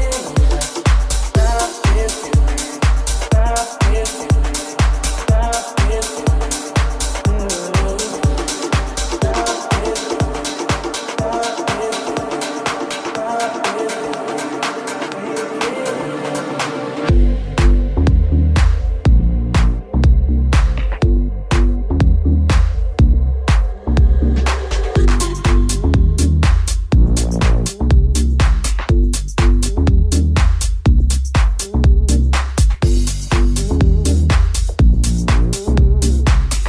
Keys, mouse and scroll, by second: 1.2 right click, 1.2 shift+middle click, 1.5 shift+right click, 1.5 shift+middle click, 1.9 shift+right click, 1.9 shift+middle click, 2.1 shift+right click, 2.2-9.0 shift+middle drag, 2.6 shift+right click, 2.8 shift+right click, 4.7 m, 7.8 Return, 9.0 right click, 9.0 middle click, 9.5 right click, 9.6-12.0 middle drag, 10.1 shift+right click, 10.7 shift+right click, 11.1 shift+right click, 11.7 shift+right click, 12.0 shift+right click, 12.1-20.0 shift+middle drag, 15.7 shift+d, 18.4-36.6 drag, 18.4 right click, 19.7 right click, 21.3 right click, 23.9 right click, 26.3 right click, 28.5 middle click, 28.5 right click, 29.9 middle click, 29.9 right click, 33.7 alt+z, 34.8 alt+z, 36.0 r.